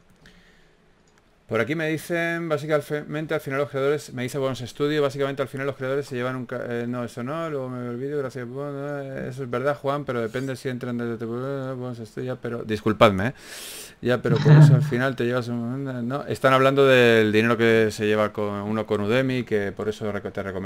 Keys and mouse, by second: 0.5 s, 2.1 KP_3, 2.7 g, 4.2 Tab, 4.6 z, 5.8 ctrl+z, 6.0 ctrl+z, 6.6 Tab, 8.2 b, 8.6 s, 10.2 b, 10.6 s, 12.0 ctrl+r, 12.5 ctrl+r, 13.3 Tab, 13.7 s, 14.5 z, 15.1 Tab, 15.7 Tab, 16.1 s, 17.1 g.